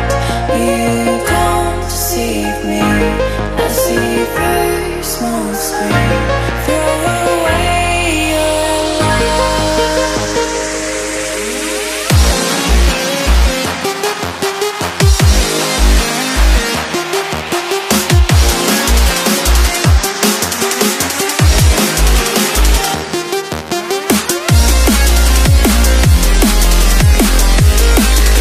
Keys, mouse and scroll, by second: 17.5 Delete, 18.1 click, 18.7-20.0 typing, 19.0 click, 19.8 click, 21.9 Return, 22.3 click, 22.5 scroll down 1, 22.7 click.